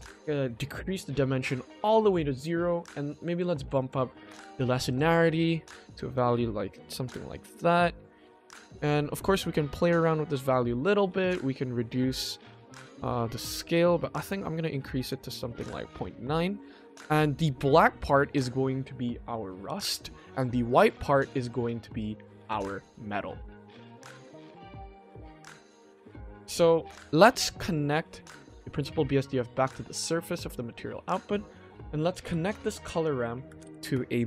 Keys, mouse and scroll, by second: 0.5 click, 3.5 click, 3.7 click, 4.8 click, 6.1 click, 6.7 click, 7.4-8.0 middle drag, 8.8 middle click, 9.4 scroll up 1, 9.7-10.3 middle drag, 11.2 click, 11.7 click, 12.4 click, 13.7 click, 13.8 click, 14.2 click, 15.0 click, 16.0-16.3 middle drag, 16.3-17.2 scroll down 2, 17.2 middle click, 17.6-17.9 scroll up 2, 18.0 middle click, 22.1 middle drag, 24.0-25.8 scroll down 1, 25.8-26.5 scroll down 1, 27.7-28.3 shift+middle drag, 29.2-29.6 drag, 30.5 shift+middle click, 31.8 click, 32.2 g, 33.0 click, 33.4 shift+a.